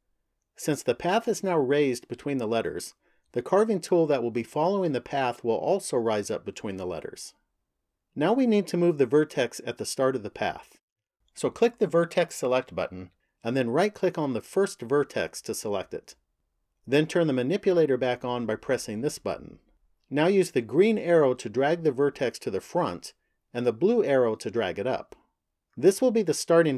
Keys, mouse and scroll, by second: 11.7 click, 14.2 right click, 18.4 click, 20.7 click, 22.9 click.